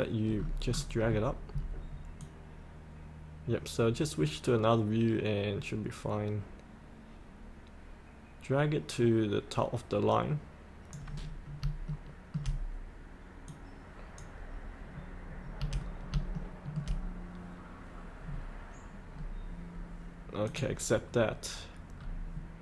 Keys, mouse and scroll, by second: 0.3-1.2 scroll down 1, 2.2-11.5 drag, 11.8 shift+middle click, 13.4-14.6 drag, 15.8 scroll up 1, 16.3 shift+middle click, 18.2-19.1 scroll down 1, 19.1-20.4 scroll up 1, 20.4 click, 21.2-21.5 scroll up 1.